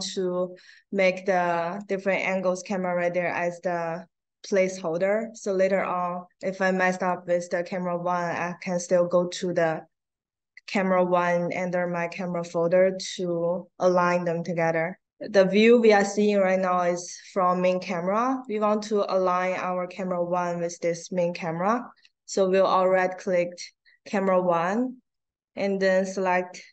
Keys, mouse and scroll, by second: 1.7 click, 2.2 click, 2.7 click, 6.9 click, 10.5 click, 15.5 click, 18.2 click, 22.7 right click.